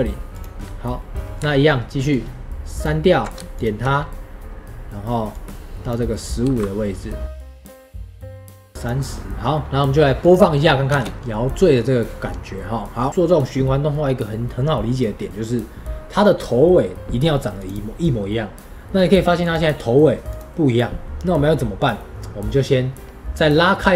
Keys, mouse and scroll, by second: 0.7-2.0 middle drag, 2.0-4.4 ctrl+drag, 5.2-6.4 drag, 6.4 g, 7.5 shift+click, 7.6 g, 7.9 ctrl+shift+click, 8.2 g, 8.3 ctrl+shift+click, 8.6 g, 10.1 click, 10.9 space, 11.1-17.5 middle drag, 17.5-21.9 drag, 21.9-23.9 middle drag.